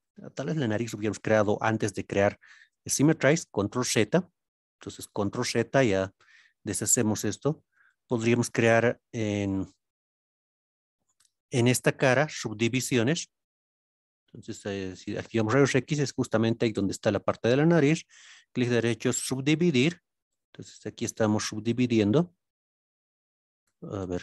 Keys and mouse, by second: 3.1 ctrl+z, 7.5 ctrl+r, 15.0 alt+z, 17.9 right click, 20.4 alt+z, 21.1-23.1 middle drag, 23.6 ctrl+z, 24.0 ctrl+z.